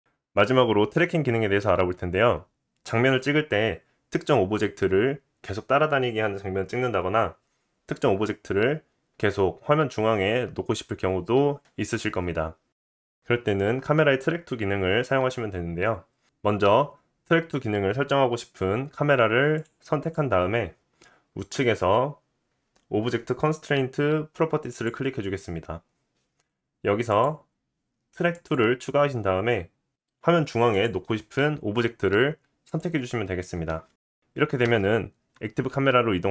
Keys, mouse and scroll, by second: 0.0 scroll up 2, 0.2-2.7 scroll down 1, 19.5 click, 19.6-20.0 middle drag, 20.0 click, 20.1-24.7 middle drag, 24.7 click, 24.8-27.1 middle drag, 27.1-31.1 drag, 31.1-36.3 middle drag, 34.7 KP_0.